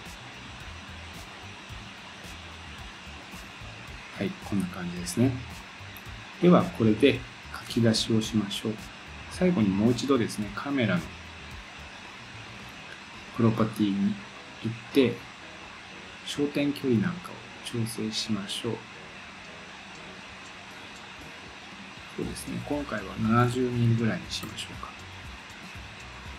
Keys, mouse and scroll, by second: 3.2 click, 14.3 click, 16.4-26.3 drag.